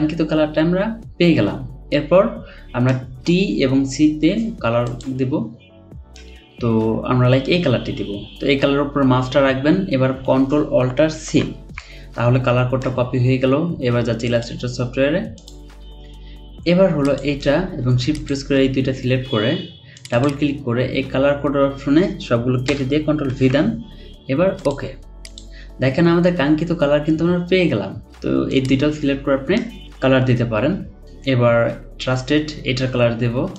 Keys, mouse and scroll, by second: 11.2 typing, 18.1 shift+click, 20.1 double click, 22.7-23.3 typing.